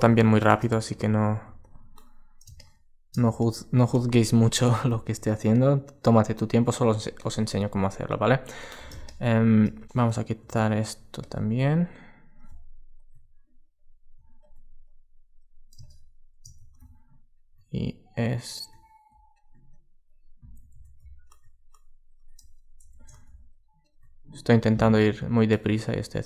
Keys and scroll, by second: 0.4 alt+space, 7.6 alt+space, 20.4 alt+super+z, 22.6 super+z.